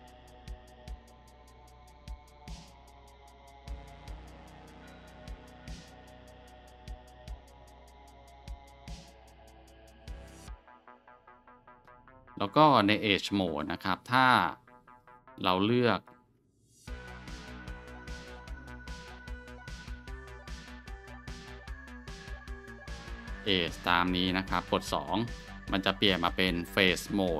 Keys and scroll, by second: 9.4-9.7 scroll, 14.3 scroll, 24.8 shift+2.